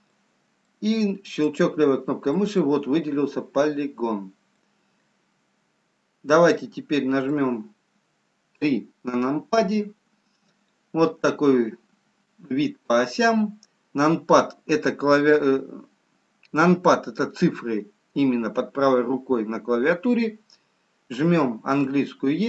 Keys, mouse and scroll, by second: 0.4 middle click, 1.6 click, 2.4 middle click, 2.4 scroll up 1, 4.0-4.3 scroll down 2, 5.1 middle click, 5.1-5.7 scroll down 1, 9.6 KP_3.